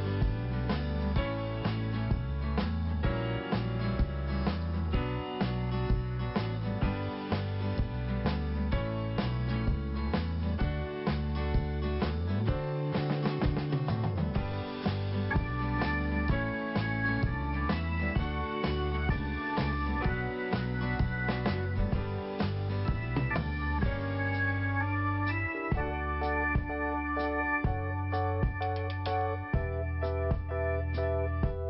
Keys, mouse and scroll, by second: 0.1 scroll up 1, 1.4 click, 2.9 click, 5.4 scroll down 1, 7.0-8.0 scroll down 2, 10.2-11.2 scroll up 1, 11.2 click, 12.4 click, 13.2 click, 14.6 click, 15.7 scroll down 1, 16.6 click, 17.4 click, 18.4 click, 22.0-23.0 scroll up 1, 24.0 scroll down 1, 24.6-24.9 scroll up 1, 25.8 p, 27.2 click, 30.2 i, 31.2 scroll up 1.